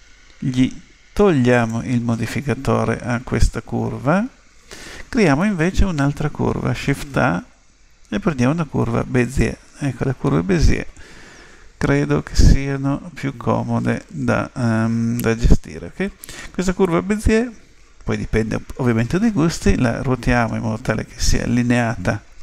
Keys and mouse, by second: 1.5 click, 6.9 shift+a.